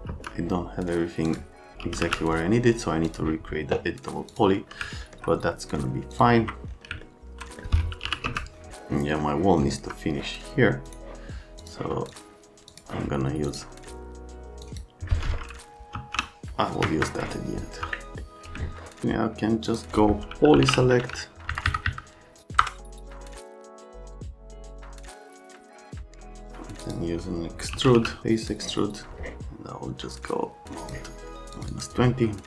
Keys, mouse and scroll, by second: 0.1 F3, 1.3 click, 1.6-2.5 typing, 3.1 click, 4.3 click, 4.7 middle click, 6.1 click, 7.0 alt+middle click, 7.8-8.8 typing, 9.7 F3, 10.9 click, 11.6 click, 12.1 click, 12.7 click, 13.5 click, 14.6 click, 15.7-16.7 typing, 16.8 Escape, 20.3-21.1 typing, 21.5 Down, 21.6 Down, 21.8 Down, 22.6 Return, 23.2 click, 23.4 right click, 23.6-24.2 ctrl+scroll up 4, 24.6 ctrl+click, 25.1 ctrl+click, 25.2 ctrl+click, 25.5 ctrl+click, 25.6 scroll up 1, 25.7 ctrl+click, 25.8 ctrl+click, 26.1 ctrl+click, 26.3 ctrl+click, 26.8 click, 27.5-28.4 typing, 30.1 click, 31.6 click, 31.7 click.